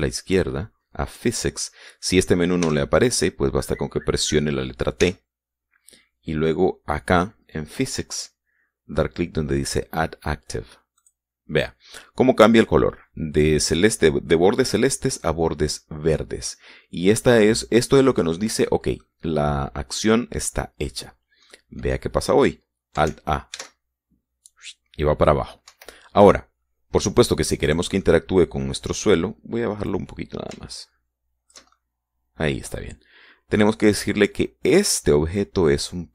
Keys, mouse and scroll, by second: 1.9 click, 3.3 t, 5.7 t, 11.7 click, 15.9-17.3 middle drag, 17.8-19.9 middle drag, 21.8-22.2 scroll down 1, 22.2-23.3 middle drag, 24.2 alt+a, 26.4 Escape, 28.4 middle click, 28.7 click, 30.6-32.4 drag, 32.8 middle click.